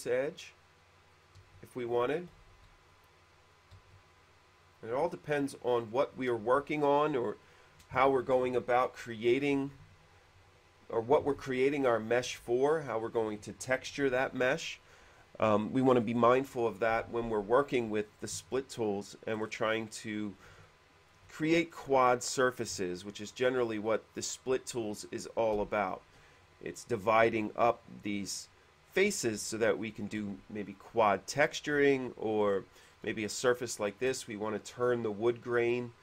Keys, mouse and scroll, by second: 1.6 q, 2.7 shift+e, 3.1 click, 3.9 q, 6.0 click, 11.3 middle click, 12.5-13.1 scroll down 2, 19.5 scroll up 1, 20.1 middle click, 20.7 shift+middle click, 21.5-22.1 scroll up 4, 29.6 shift+middle click, 32.6-33.2 scroll up 5, 33.5 shift+middle click.